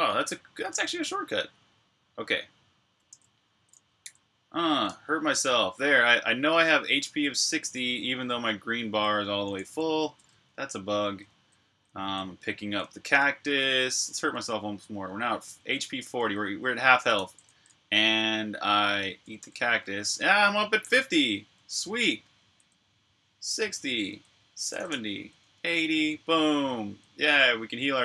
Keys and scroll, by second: 0.4-1.1 typing, 2.8-5.6 typing, 6.9-7.5 typing, 8.6-15.4 typing, 19.5 d, 20.8-28.0 typing.